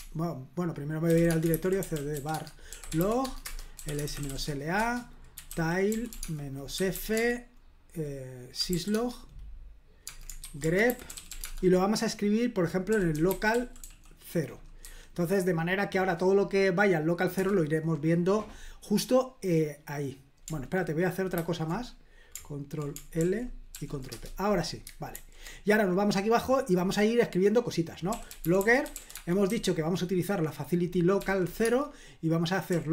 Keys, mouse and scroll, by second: 0.0-14.8 typing, 17.4 Return, 21.4 ctrl+c, 23.2 ctrl+l, 23.7 ctrl+p, 24.1 Return, 25.1 super+j, 27.9-29.5 typing, 31.2-32.9 typing.